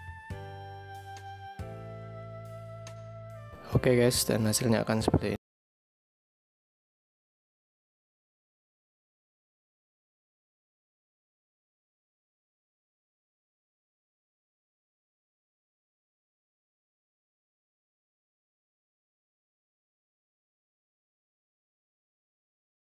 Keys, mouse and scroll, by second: 0.2 space.